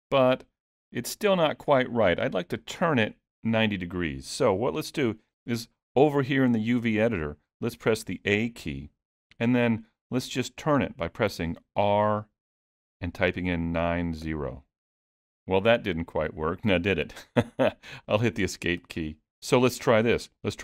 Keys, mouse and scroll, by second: 7.9 a, 11.8 r.